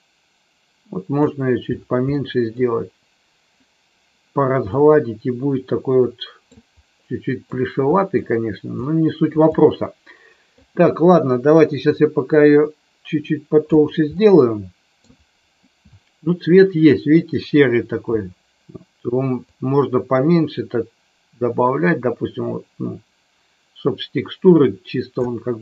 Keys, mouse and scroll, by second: 2.1 middle click, 4.7-6.5 middle drag, 7.0-7.5 middle drag, 7.8 middle drag, 8.8-9.2 middle drag, 9.6-10.6 middle drag, 11.8-13.7 drag, 14.2 middle click, 19.6-25.3 drag.